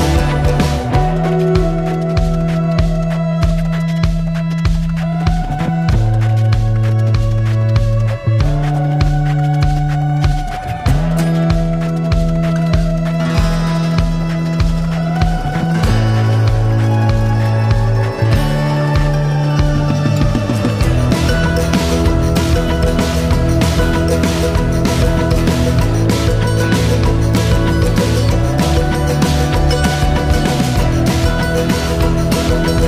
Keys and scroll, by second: 5.2 ctrl+s.